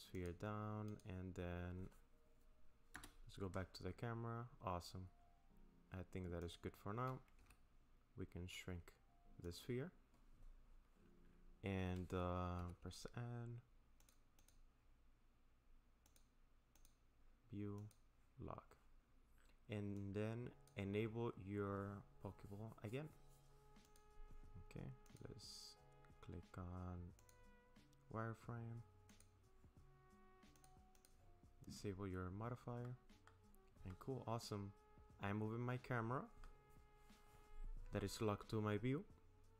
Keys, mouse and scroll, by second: 0.9 click, 2.9 KP_0, 4.6 scroll down 2, 5.2-5.9 scroll up 3, 6.4 click, 7.4 s, 12.6 n, 14.0 click, 14.4 click, 16.1 click, 16.8 click, 17.8 click, 20.0 click, 23.8 click, 27.2 click, 29.1 click, 30.6 click, 31.0 click, 31.5-32.0 scroll down 1, 32.8 middle click, 33.9 middle click, 35.1 middle click.